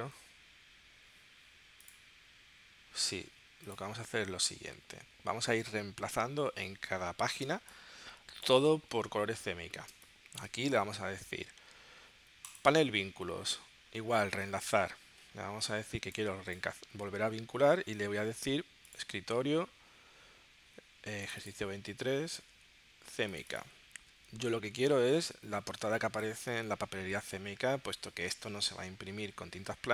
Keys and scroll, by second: 7.5 space, 9.9 space.